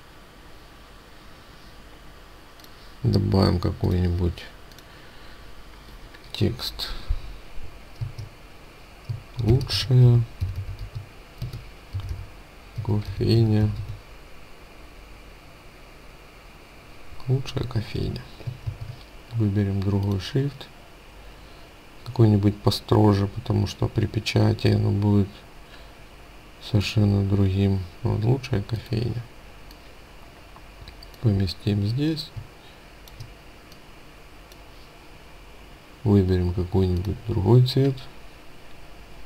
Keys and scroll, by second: 18.6 ctrl+a.